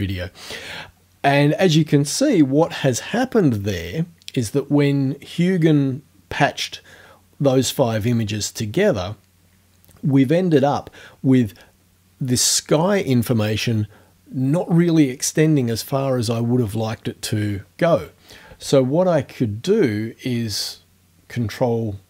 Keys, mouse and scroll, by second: 19.3-19.6 ctrl+scroll down 2.